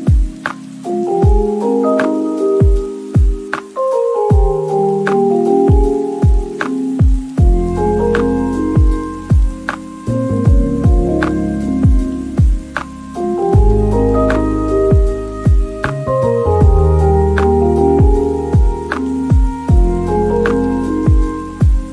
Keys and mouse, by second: 0.2 drag, 0.6 click, 1.8-2.3 drag, 2.5 middle drag, 2.8 z, 3.0 click, 3.8 click, 4.0 click, 4.2 click, 4.5-4.8 middle drag, 4.9-6.5 typing, 5.5 middle click, 5.9 middle click, 6.8 click, 7.0 middle click, 7.3-9.2 drag, 10.0 click, 10.7 click, 11.3-13.0 drag, 13.3 click, 13.8 middle drag, 14.8-15.4 drag, 16.0 shift+middle click, 16.3 z, 16.3 z, 16.8-17.9 drag, 18.8 shift+middle click, 19.5-21.9 typing, 19.7 shift+middle click, 20.3 Tab, 20.8 middle click, 21.7 Tab.